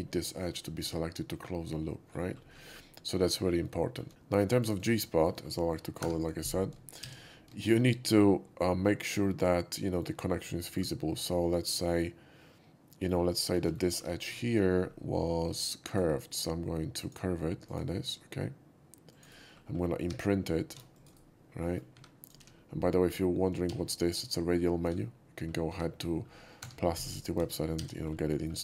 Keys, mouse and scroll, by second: 0.5-1.0 shift+scroll up 2, 2.3 scroll down 1, 3.6 ctrl+z, 3.8 middle click, 4.6 click, 4.8 right click, 5.4 shift+scroll up 1, 5.6 shift+middle click, 6.0 3, 6.1 click, 7.0 shift+x, 7.5 shift+middle click, 7.5 shift+x, 7.8-10.0 shift+middle drag, 10.6 shift+middle drag, 11.4 shift+middle drag, 12.8 shift+middle click, 13.0 scroll down 1, 13.2 shift+middle drag, 13.6 alt+middle click, 13.9 alt+middle click, 14.1-14.8 scroll up 3, 15.8 shift+click, 17.0 shift+click, 17.6 click, 19.1 click, 19.4 middle click, 19.6 middle click, 20.6 shift+q, 20.9 click, 21.6 middle click, 22.2 click, 22.2 2, 24.2 shift+q, 25.7 2, 26.6 3, 26.9 click, 27.7-28.6 typing, 28.0 shift+middle click, 28.3 shift+middle drag.